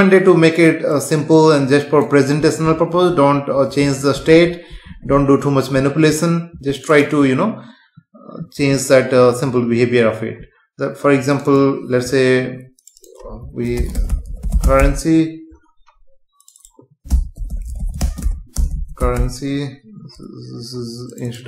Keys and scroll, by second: 18.0 space, 18.5 BackSpace.